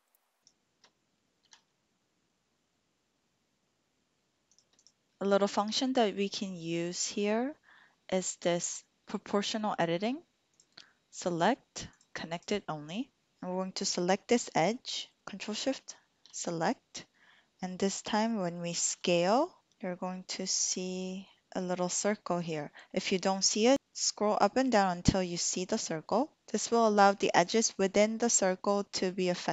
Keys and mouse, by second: 1.4 s, 4.5 shift+click, 10.5-13.0 drag, 15.7 alt+shift+click, 18.9 s.